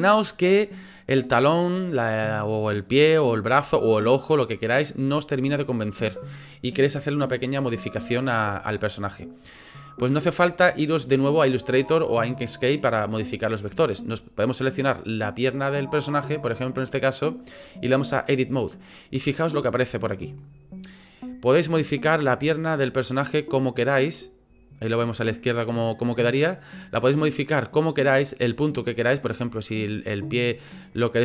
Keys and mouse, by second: 14.2 click, 17.6 click, 19.2-20.9 shift+middle drag, 21.8 click, 22.9 click, 23.0 click, 23.6 click, 24.3 click.